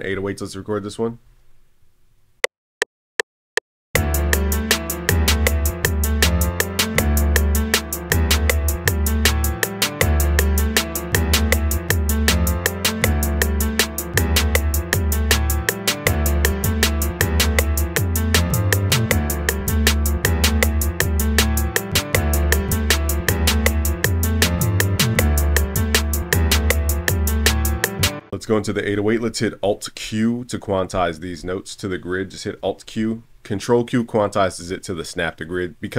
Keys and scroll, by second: 32.7 alt+q.